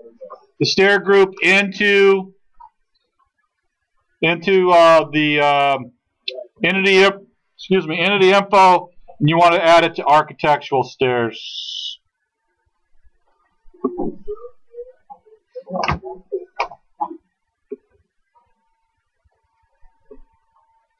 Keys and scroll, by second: 1.8 space.